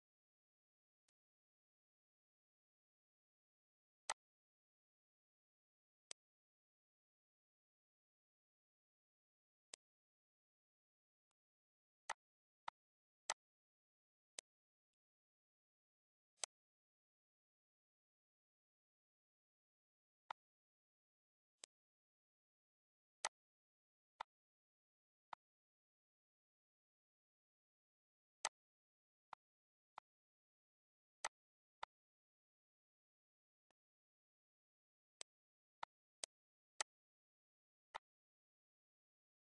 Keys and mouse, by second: 1.0 click, 3.9 click, 6.0 click, 7.0 click, 9.6 click, 11.1 click, 12.0 click, 12.5 click, 13.1 click, 13.8 Delete, 14.3 click, 16.3 click, 18.8 click, 20.1 click, 21.5 click, 23.1 click, 24.1 click, 24.7 Delete, 25.1 click, 27.5 click, 28.3 click, 29.1 click, 29.8 click, 31.1 click, 32.8 click, 33.5 click, 35.0 click, 35.7 click, 36.6 click, 37.4 Delete, 37.8 click, 39.0 click.